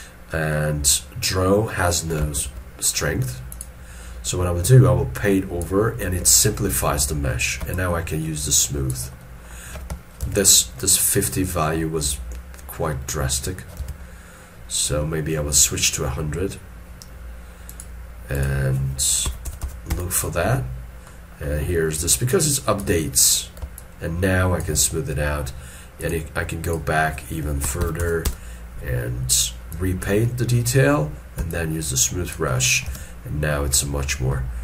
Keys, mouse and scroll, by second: 2.4 shift+f, 7.7 shift+click, 9.2 middle click, 10.2 ctrl+z, 11.0 middle click, 13.8 ctrl+z, 19.3 1, 21.1 middle click, 23.6 middle click, 23.8 shift+click, 28.3 Return, 31.5 shift+click, 32.9 alt+e, 33.5 scroll down 1.